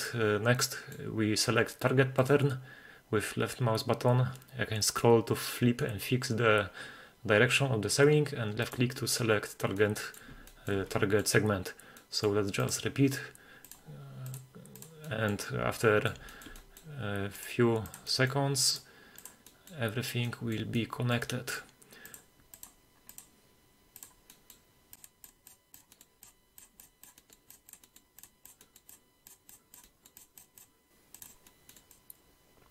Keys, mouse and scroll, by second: 0.0 click, 0.6 middle click, 2.2 click, 5.3-5.6 scroll up 1, 8.6 click, 9.8-10.2 middle drag, 10.5 shift+middle drag, 10.9-11.2 middle drag, 12.0 middle drag, 12.6 click, 13.6 click, 14.3 click, 14.8 click, 15.0 middle drag, 15.8-16.1 middle drag, 16.3 shift+middle drag, 16.6 middle click, 17.4 click, 17.8 click, 18.1 middle drag, 18.3-18.7 scroll up 1, 18.7 click, 19.2 drag, 19.5 middle click, 20.2-20.6 middle drag, 20.8-21.2 middle drag, 21.2-21.6 middle drag, 22.1 click, 22.5 click, 23.1 drag, 23.7 scroll up 1, 24.0 click, 24.3 middle drag, 25.0 click, 25.4 click, 25.7 drag, 25.8 middle click, 26.2-26.8 drag, 27.0 drag, 27.2 middle click, 27.4 drag, 27.6 drag, 27.8 middle click, 28.2-28.5 drag, 28.6 middle click, 28.8 drag, 29.2 click, 29.4 drag, 29.7 click, 29.8 middle drag, 30.1 click, 30.3 drag, 30.9 scroll up 1, 31.2 click, 31.4-31.8 middle drag, 31.8 drag, 32.1 click, 32.4 click, 32.6 click.